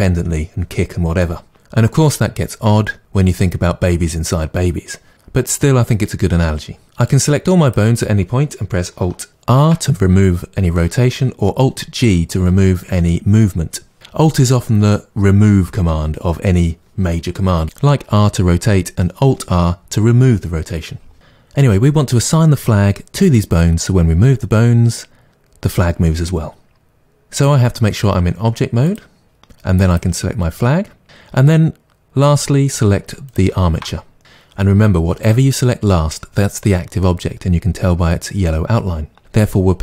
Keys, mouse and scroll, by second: 7.1 click, 9.5 alt+r, 28.9-29.9 drag, 33.3 shift+click.